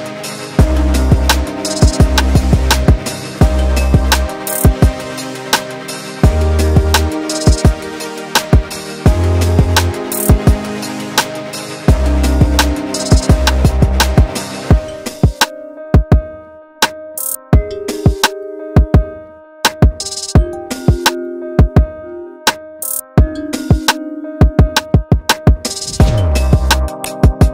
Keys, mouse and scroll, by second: 0.0-1.3 middle drag, 1.3-2.1 scroll up 2, 2.1-6.3 middle drag, 6.3 click, 8.5 alt+a, 9.3 click, 10.7 click, 11.7 alt+a, 11.9 scroll down 1, 12.1-13.5 middle drag, 13.5 click, 14.7 shift+click, 16.4 KP_Divide, 17.5 ctrl+KP_7, 18.6 alt+a, 18.9 middle click, 19.6 click, 21.3 h, 22.3 click, 23.6 ctrl+KP_7, 24.6 shift+middle click, 25.1-25.4 scroll up 4, 26.2 alt+a, 26.8 click.